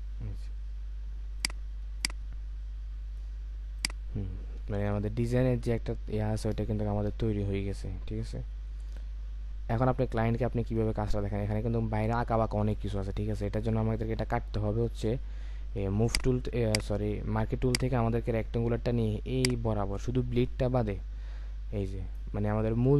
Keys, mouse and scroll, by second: 4.8 alt+scroll up 1, 5.2-5.8 alt+scroll down 1, 16.7 right click.